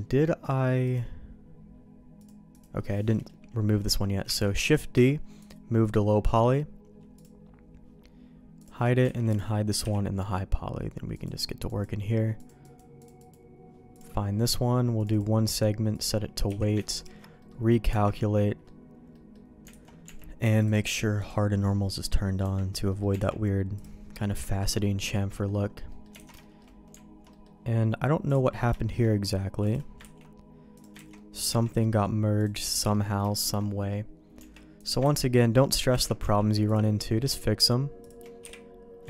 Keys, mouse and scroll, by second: 0.9 click, 2.5 click, 3.1 middle click, 3.7 middle click, 4.4 shift+d, 4.9 m, 7.1 click, 8.6 click, 9.1 alt+a, 9.3 click, 9.8 h, 11.1 click, 11.6 click, 12.3 click, 12.6 click, 13.0 click, 13.9 click, 14.9 click, 15.5 click, 16.4 q, 17.4 middle click, 17.9 Tab, 18.3 middle click, 19.1 middle click, 19.8 alt+a, 20.0 Tab, 21.2-22.4 drag, 22.4 Tab, 23.1 Tab, 23.7 click, 24.3 KP_Decimal, 25.1 middle click, 25.8 middle click, 26.1 alt+a, 26.4 shift+middle click, 27.3 middle click, 28.2 click, 28.7 shift+middle click, 29.6 click, 30.1 ctrl+x, 30.7 click, 31.0 ctrl+x, 31.1 middle click, 31.4 Tab, 31.8 middle click, 32.3 click, 32.6 shift+middle click, 32.9 middle click, 33.3 shift+middle click, 34.3 Tab, 34.7 click, 35.2 ctrl+x, 35.7 click, 35.9 ctrl+x, 36.2 Tab, 36.6 click, 37.0 middle click, 37.4 shift+middle click, 38.0 shift+click, 38.4 j, 38.4 h.